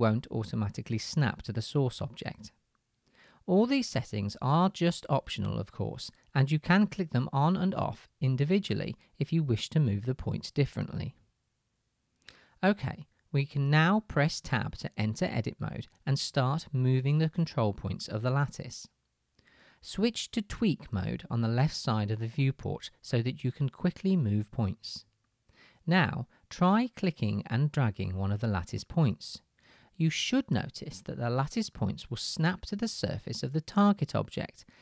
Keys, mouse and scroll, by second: 4.1 click, 5.1-6.1 middle drag, 6.1-7.6 drag, 7.6 middle click, 8.2-11.9 drag, 11.9-21.3 middle drag, 15.5 Tab, 21.3-34.8 drag, 23.5-27.3 middle drag, 30.3-31.7 middle drag, 33.0 middle click.